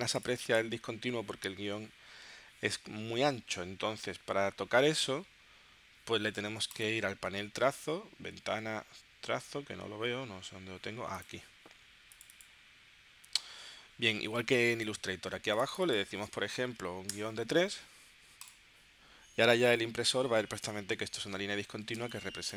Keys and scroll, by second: 16.5 3, 17.1 Return, 22.0 space.